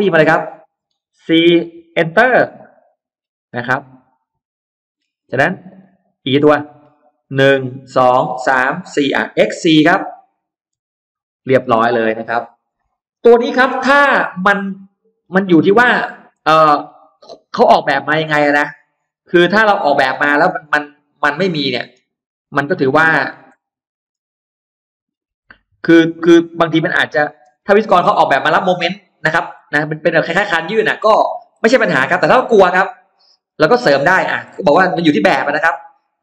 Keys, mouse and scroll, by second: 2.2 Return, 2.8 scroll down 2, 3.0 middle click, 3.6-4.6 scroll up 2, 4.8-5.2 scroll down 4, 4.8 middle click, 5.3 middle click, 9.9-11.0 typing, 12.7 middle click, 13.2-13.6 scroll up 2, 13.4-15.0 middle drag, 15.2-16.1 scroll up 1, 15.9 middle click, 16.2 scroll down 1, 16.4 space, 17.0-19.0 middle drag, 18.9-20.0 scroll down 2, 20.2-21.0 scroll up 4, 21.2 middle click, 22.0-22.4 scroll up 2, 22.7 shift+click, 23.8 middle click, 23.8 scroll up 2, 24.1 a, 24.6 middle click, 25.1 s, 25.7 click, 26.9 click, 27.2-28.9 scroll down 2, 27.3 space, 28.4 middle click, 29.0-29.6 scroll up 1, 29.6 middle click, 30.0-30.3 scroll down 1, 30.6 middle click, 30.8 scroll up 1, 31.0 scroll down 1, 31.1-31.4 scroll up 1, 31.6 middle click, 31.8 scroll down 1, 32.2-33.2 middle drag, 33.2-33.6 scroll down 2, 33.7-34.0 scroll up 2, 33.8 middle click, 34.3 scroll down 2, 34.8 space, 34.9 click, 36.0 middle click.